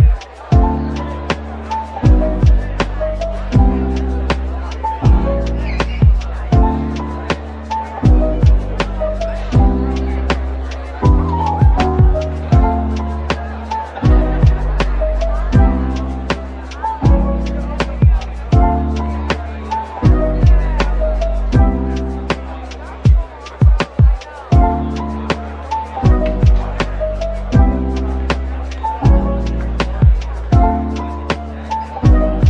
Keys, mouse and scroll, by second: 5.2-5.7 scroll up 1, 5.7-7.3 typing, 9.7 typing, 11.1-11.5 typing, 15.4 Tab, 15.7 scroll down 1, 16.6 typing, 18.2-19.1 scroll up 1, 19.1 typing, 20.2 Tab, 21.0 typing, 23.3 scroll down 1, 25.1 typing, 25.6 double click, 26.0 Tab, 28.2 double click, 29.1-30.5 typing, 30.8 Return.